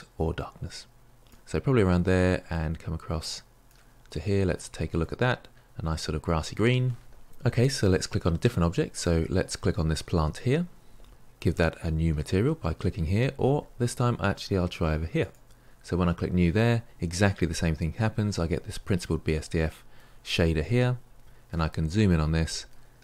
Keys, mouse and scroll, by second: 4.1-8.9 middle drag, 8.9 click, 15.2-23.0 drag.